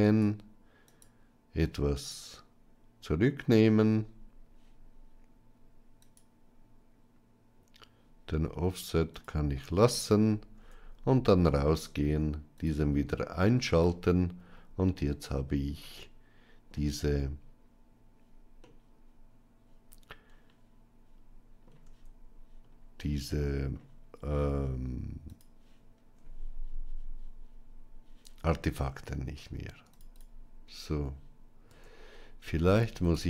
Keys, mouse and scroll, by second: 0.7 click, 2.0-3.6 drag, 5.9 click, 10.5 Tab, 12.5 click, 13.7-16.6 middle drag, 18.6-21.5 middle drag, 21.7 Tab, 22.8 middle click, 25.2 click, 30.0 alt+click, 31.6 Tab, 32.9 alt+click.